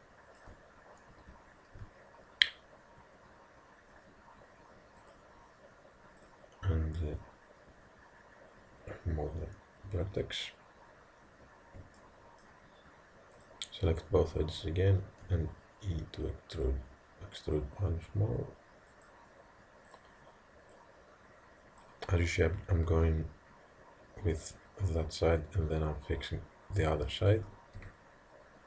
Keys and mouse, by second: 0.0-1.8 middle drag, 1.8 g, 6.2-8.8 drag, 12.0-13.4 middle drag, 13.4 click, 15.3 e, 20.0-22.6 drag, 27.8 e.